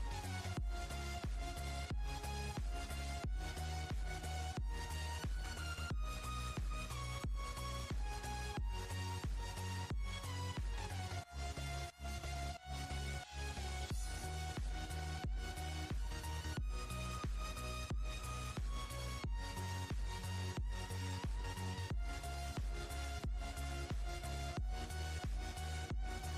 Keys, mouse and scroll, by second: 0.8 drag, 1.3-3.8 drag, 5.6 click, 7.3-9.6 drag, 9.6 KP_1, 10.7 scroll up 2, 12.0 click, 12.7-13.0 scroll up 4, 14.1 click, 14.6 click, 15.7 click, 16.0-17.9 drag, 20.3 drag, 21.1 click, 22.6 click, 23.2-23.5 scroll down 4, 24.1 click, 24.9 scroll down 2, 26.0 click.